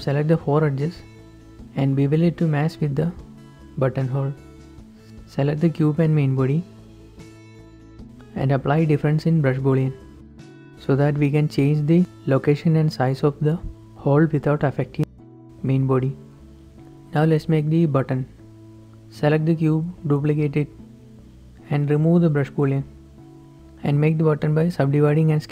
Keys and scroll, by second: 0.0-0.7 typing, 1.8 z, 3.0 ctrl+b, 5.1 Tab, 5.4 Tab, 5.4 ctrl+r, 5.4 ctrl+s, 12.9 shift+g, 16.3 Escape, 17.9 ctrl+s, 19.9 d, 20.4 Escape, 23.8 ctrl+z, 23.8 Tab, 23.8-25.5 typing.